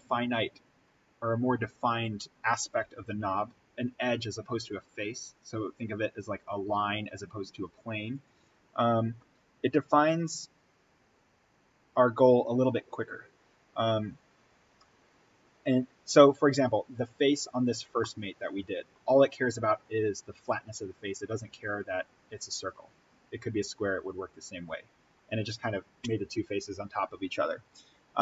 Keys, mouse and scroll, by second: 8.1 click, 11.1-17.4 drag, 17.4-17.9 scroll down 1, 18.0-21.2 middle drag, 24.5-26.2 scroll up 1.